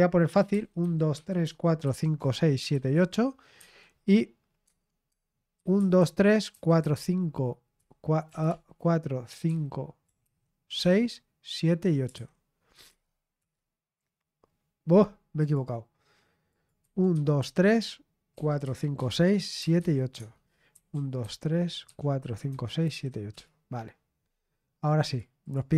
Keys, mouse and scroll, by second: 0.5-3.4 typing, 3.5 Escape, 4.6 Tab, 5.0 Tab, 5.2-10.7 typing, 11.7-12.6 typing, 12.8 Tab, 13.3 Return, 15.3 click, 16.4 click, 16.5-20.7 typing, 21.8 Tab, 22.1-23.8 typing, 25.0 click.